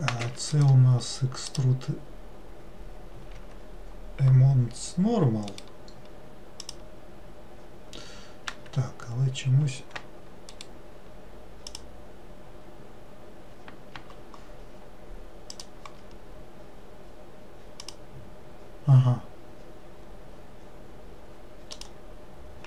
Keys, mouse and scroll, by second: 1.8-3.7 right drag, 5.7-8.7 right drag, 10.7-13.8 right drag, 15.7-21.0 drag, 21.9-22.6 drag.